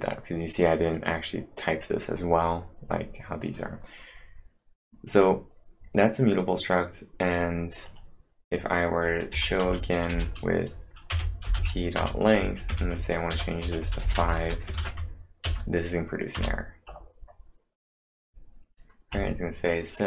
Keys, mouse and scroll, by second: 0.6 click, 1.0 click, 2.1 scroll up 1, 3.5 click, 4.2 scroll down 3, 7.9 click, 7.9 scroll down 1, 9.3-14.8 typing, 9.6 Return, 14.8 ctrl+`, 15.5 Up, 16.4 Return, 18.5 scroll down 1, 19.8-20.0 scroll up 1.